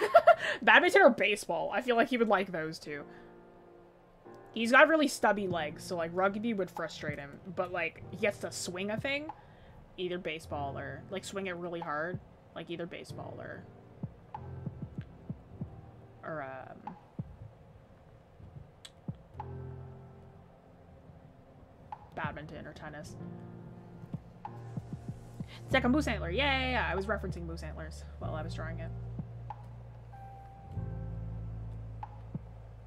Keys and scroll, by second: 28.1 scroll down 1, 30.1 scroll up 1.